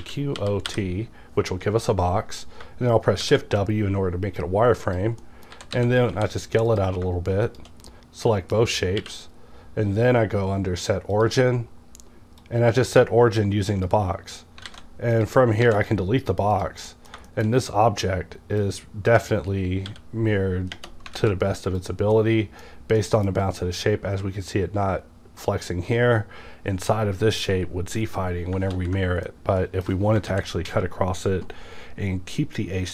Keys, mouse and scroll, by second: 0.0-0.7 typing, 3.2 shift+w, 4.3 typing, 4.8 click, 5.2 middle click, 5.2 middle click, 5.5-6.1 typing, 6.7 click, 6.9 click, 7.5 shift+click, 7.9-11.1 middle drag, 9.0 q, 11.1 click, 12.4-15.2 drag, 14.7 alt+a, 15.6 x, 15.8 click, 16.3 scroll down 2, 16.5 click, 16.9 middle click, 17.4 shift+middle click, 18.6-20.7 drag, 19.9 w, 21.2 x, 21.8 click, 22.2-28.8 middle drag, 28.8 ctrl+z, 29.3-32.9 middle drag, 30.3 ctrl+z.